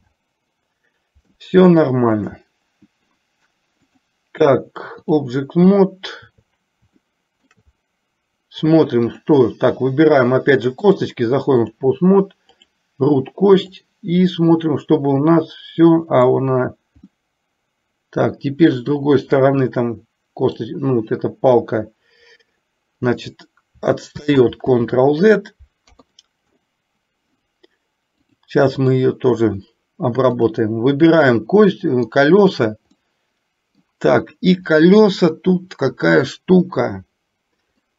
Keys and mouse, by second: 0.1 alt+r, 2.2 click, 4.1-5.3 drag, 7.1 shift+middle click, 9.2 click, 11.1 click, 12.6 click, 13.8-16.6 drag, 17.3-20.7 middle drag, 24.4 ctrl+z, 26.0 KP_3, 28.3 click, 30.4 click, 31.4 middle click, 33.2 middle click.